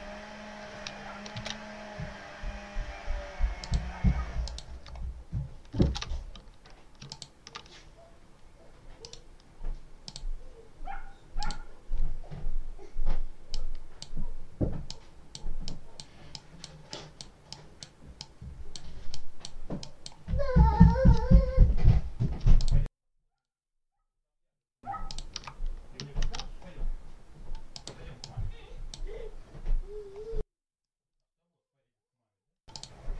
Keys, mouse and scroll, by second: 3.5 click, 4.3 shift+click, 5.1 shift+scroll up 3, 7.0 ctrl+click, 8.9 right click, 9.9 click, 11.3 click, 13.4 click, 14.7-15.4 drag, 15.5 click, 16.2 click, 17.4 click, 18.1 click, 19.0 click, 19.7 click, 22.5 ctrl+alt+click, 23.3 ctrl+alt+click, 24.9 ctrl+alt+click, 26.1 ctrl+s, 27.6 click, 28.1 click, 30.7 click, 32.0 scroll up 2, 32.6 click.